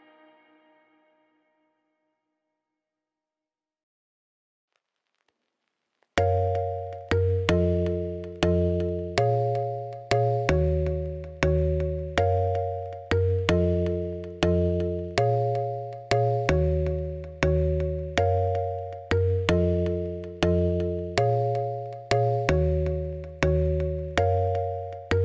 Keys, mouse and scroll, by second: 0.2 middle click, 0.3 middle click, 0.6 s, 1.7 middle click, 1.9 middle click, 2.2 click, 2.2 shift+s, 3.2 shift+a, 5.5 middle click, 5.7 scroll up 2, 6.0 g, 6.8 middle click, 7.0-8.2 middle drag, 8.2 scroll down 6, 8.5 middle click, 12.5 middle click, 12.8 ctrl+s, 13.4 click, 14.9 click, 16.7 click, 16.8 ctrl+s, 16.9 KP_0, 17.2 scroll down 10, 17.5 shift+middle click, 17.9 ctrl+s, 18.3 click, 19.4 click, 21.3-22.4 drag, 23.7-25.2 drag.